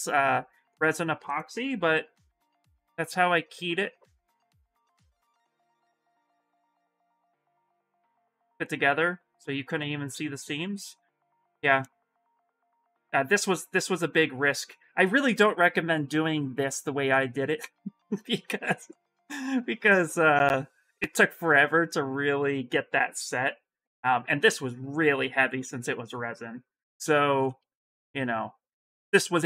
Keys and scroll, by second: 1.3 shift+x, 6.0 shift+x, 13.3 s.